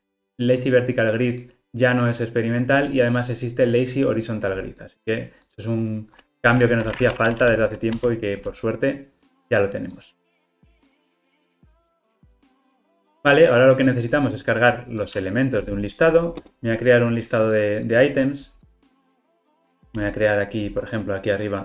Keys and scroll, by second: 8.0 Escape, 11.0 alt+super+l, 11.1 ctrl+alt+o.